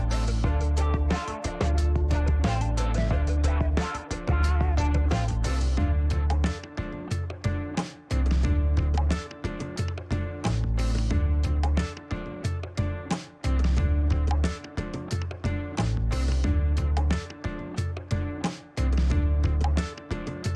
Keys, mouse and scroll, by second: 0.3 middle click, 2.8 click, 3.0 space, 4.7 middle click, 5.3 shift+right click, 6.5 scroll down 2, 6.9 middle click, 7.5 shift+right click, 9.7 click, 14.5 click, 18.8 click.